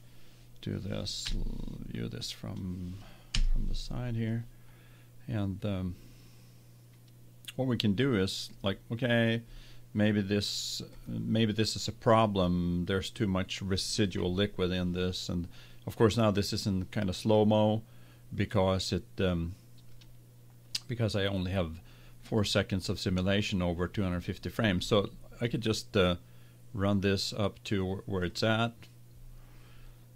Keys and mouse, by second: 1.6 KP_1, 3.6 KP_1, 11.0-12.7 drag, 19.9-21.8 drag, 28.2-30.1 drag.